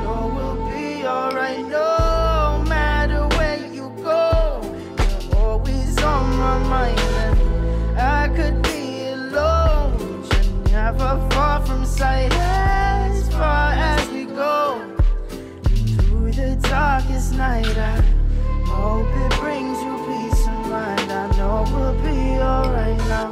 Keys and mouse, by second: 0.6 middle drag, 1.3 click, 1.7-2.6 drag, 3.0 click, 3.1-3.5 drag, 3.9 click, 4.5 middle drag, 5.0 middle click, 6.0 click, 7.0 click, 8.1 middle click, 8.4 shift+a, 9.9 click, 11.5 s, 12.2 s, 13.1 s, 14.4 click, 15.1 middle click, 15.8 click, 16.1 s, 16.7 middle click, 17.1 click, 18.9 middle click, 20.2 middle click, 20.5 middle click, 20.8 click, 21.3 shift+d, 22.5 r.